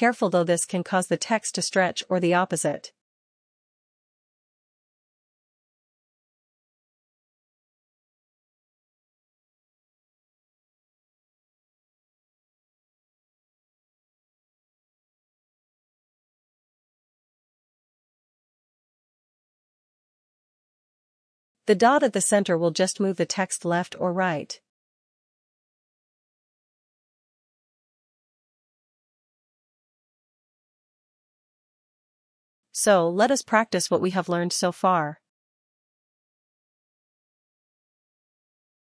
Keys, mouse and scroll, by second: 1.0 click, 5.2 click, 6.3 click, 8.4 ctrl+z, 9.0 ctrl+z, 9.5 ctrl+z, 9.7 ctrl+z, 10.2 ctrl+z, 10.5 ctrl+z, 10.8 ctrl+z, 11.4 click, 12.8 click, 13.5 click, 14.0 ctrl+z, 14.3 ctrl+z, 14.8 ctrl+z, 18.0 click, 19.5 ctrl+z, 20.0 ctrl+z, 20.6 ctrl+z, 21.1 ctrl+z, 23.6 click, 28.0 click, 29.0 click, 33.7 ctrl+-, 33.7 click.